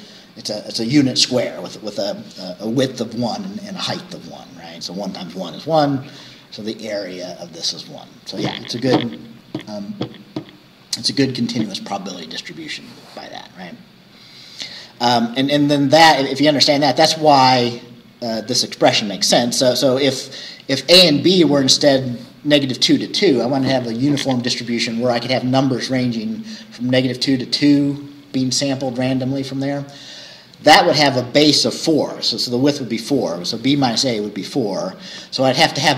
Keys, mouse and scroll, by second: 15.9 scroll up 2.